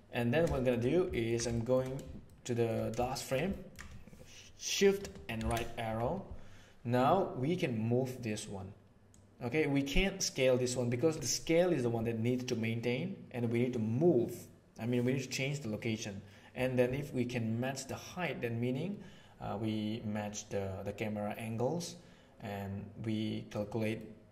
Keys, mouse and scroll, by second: 0.5 shift+middle click, 1.1 ctrl+middle click, 1.5 shift+middle click, 2.3 shift+middle click, 3.1 shift+middle click, 3.5 ctrl+middle click, 5.4 shift+Right, 9.1-11.1 drag, 18.2-23.5 drag, 23.9-24.3 middle drag.